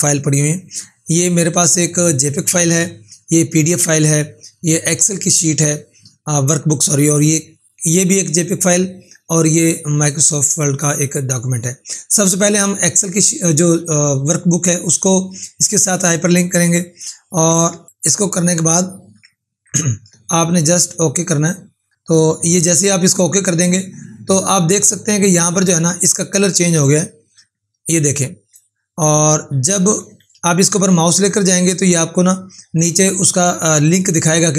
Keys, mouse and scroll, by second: 22.9 click, 27.4 ctrl+4, 30.0 ctrl+4.